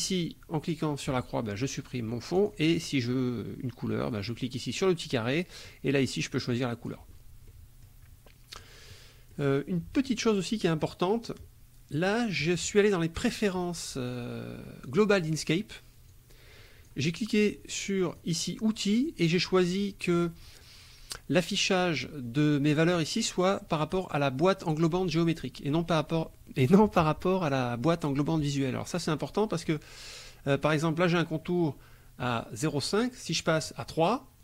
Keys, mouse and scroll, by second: 2.4 click, 4.3 click, 5.7-7.1 drag, 7.5 middle click, 8.6 middle click, 9.3 middle click, 14.9 click, 16.1 click, 18.1 click, 29.7 click, 32.3 right click, 33.6 click.